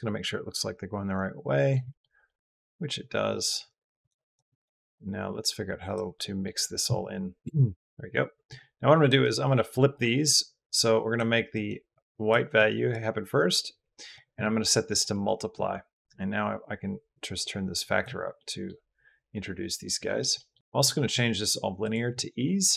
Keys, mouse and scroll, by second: 1.7 shift+middle click, 2.0 middle drag, 3.2 middle click, 3.9 middle click, 4.4 middle click, 4.8 click, 6.0 click, 8.3 click, 9.0 click, 9.7 click, 10.5 click, 11.3 click, 11.8 click, 12.4 click, 13.2 middle click, 14.9 middle click, 16.0-17.8 middle drag, 19.4 middle drag, 19.9 middle drag, 20.2 middle drag, 20.6 middle click, 21.0-21.8 middle drag, 22.2 middle click.